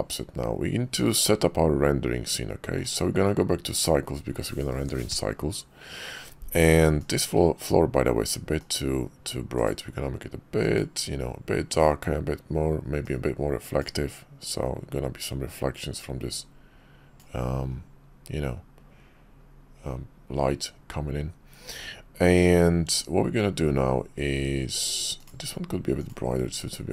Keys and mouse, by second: 2.8-4.1 drag, 7.0 click, 8.6 click, 9.6 click, 10.7 click, 13.0 click, 16.0-17.2 drag, 17.2-18.3 middle drag.